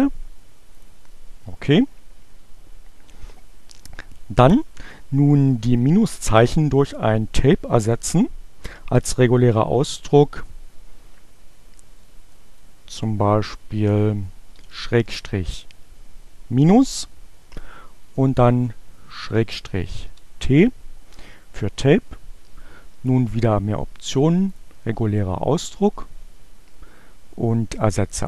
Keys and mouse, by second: 0.8 click, 12.1 click, 14.5 -, 17.3-18.5 drag, 19.6 t, 24.6 click, 27.7 click.